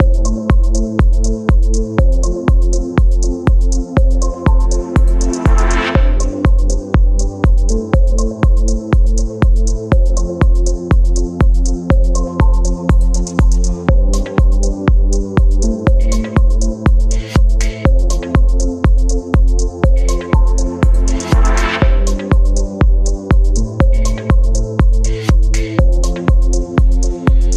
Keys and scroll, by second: 10.7 space, 17.4 Return.